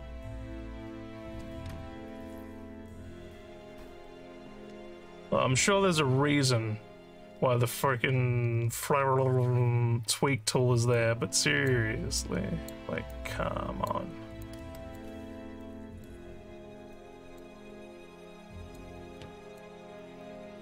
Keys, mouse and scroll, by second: 0.2 click, 1.2 click, 2.2 click, 3.7 click, 4.6 click, 5.7 click, 10.9 click, 12.2 click, 13.1 click, 14.5 click, 15.6 click, 16.9 click, 18.2 click, 19.2 click, 20.0 click.